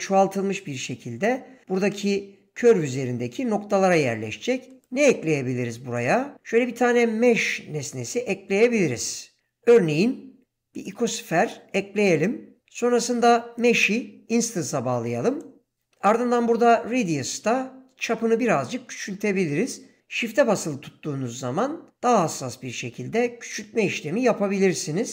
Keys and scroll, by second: 7.0 shift+a.